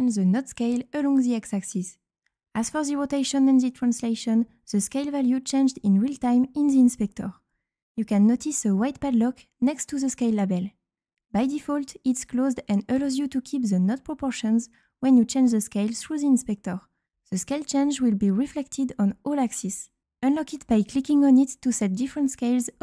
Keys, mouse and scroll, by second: 1.0-3.4 drag, 4.6-5.8 drag, 6.6-8.4 drag, 12.6 click, 21.0 click, 22.0 click.